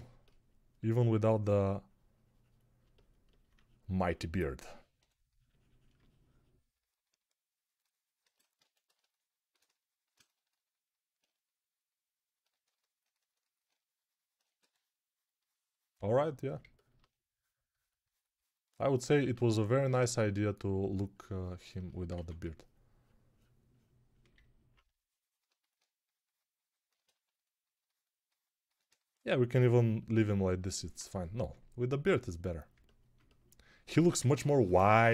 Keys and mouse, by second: 1.3 3, 4.8 2, 14.4 2, 32.6-35.1 alt+middle drag.